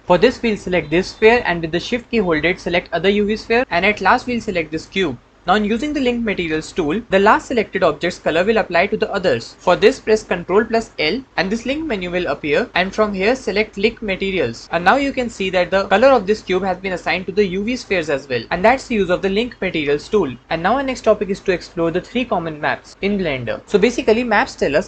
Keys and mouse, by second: 9.9 ctrl+l, 10.7 ctrl+l.